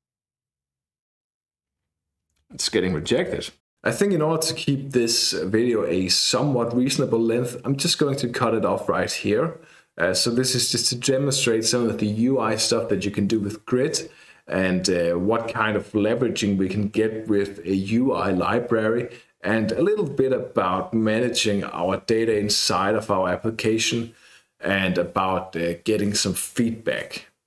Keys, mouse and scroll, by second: 3.2 ctrl+r.